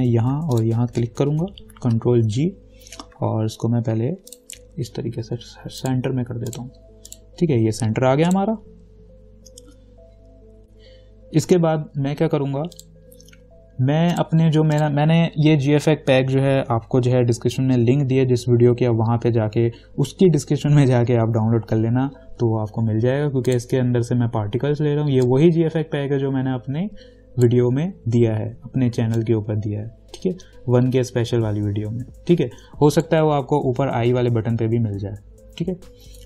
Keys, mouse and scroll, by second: 0.8 ctrl+click, 2.5 ctrl+g, 4.5 ctrl+click, 6.0 click, 12.9 click, 23.7-29.4 drag, 29.4-36.2 alt+drag.